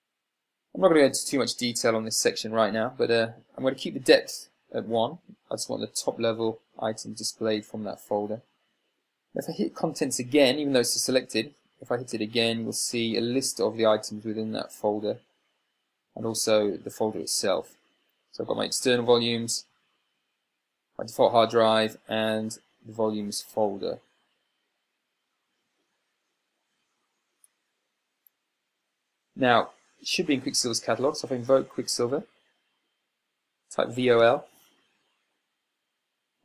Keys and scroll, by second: 33.9-35.1 typing.